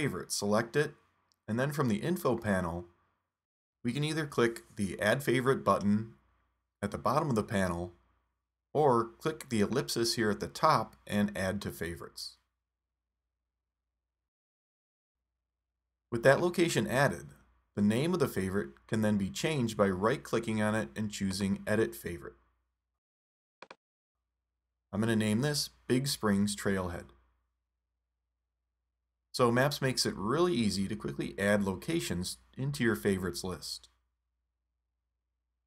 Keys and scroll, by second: 25.6-26.8 typing, 31.1 Return.